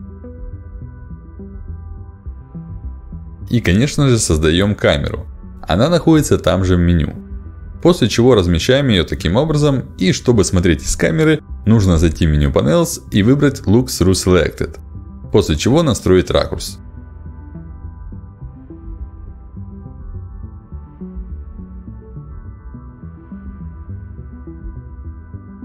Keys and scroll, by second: 3.4 space, 12.4 ctrl+alt+d.